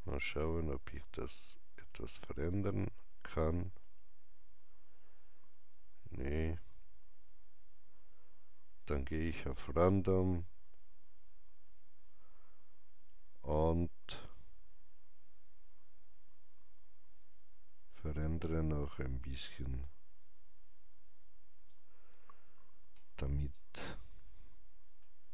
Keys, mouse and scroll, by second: 8.7-12.4 drag, 17.1-25.2 drag, 22.9 alt+right click, 24.2 alt+middle click, 25.2-25.3 alt+drag.